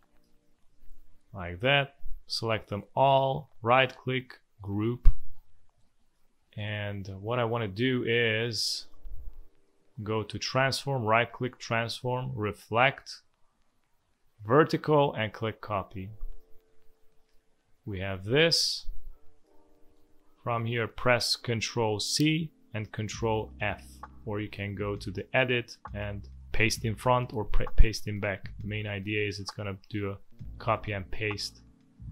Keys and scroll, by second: 0.2 Delete, 1.2 v, 5.8 space, 7.2 space, 16.0 v, 16.6 space, 19.9 space, 22.0 ctrl+c, 23.5 ctrl+f.